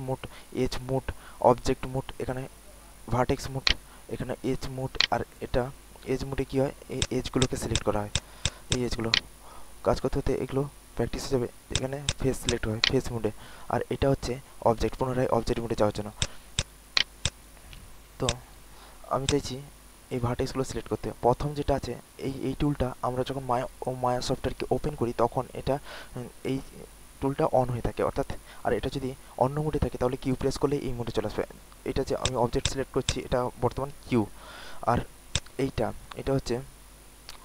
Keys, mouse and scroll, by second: 0.7-6.9 right drag, 6.9 click, 9.0-10.3 right drag, 10.9 scroll up 1, 11.7 click, 12.7-15.3 right drag, 15.4 alt+middle click, 16.1 click, 16.5 alt+click, 17.2 alt+click, 17.7 alt+middle click, 18.2 click, 18.7 alt+middle click, 19.2 alt+click, 20.1 alt+middle click, 32.1 click.